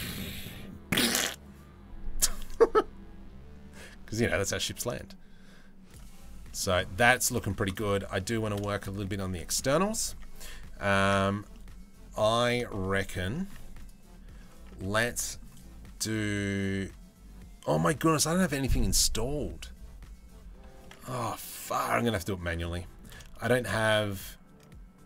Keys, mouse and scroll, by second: 6.1 middle click, 6.7 shift+middle click, 7.0 middle click, 7.7 middle click, 8.3 shift+middle click, 8.4 middle click, 8.8 Tab, 8.9 middle click, 9.8 Tab, 11.1 Tab, 11.1-12.1 middle drag, 12.9 middle click, 13.4 Tab, 13.4 click, 14.1 Tab, 14.4 middle click, 20.4 middle click, 21.5 middle click, 22.2 Tab, 22.3 middle click, 23.1 shift+click.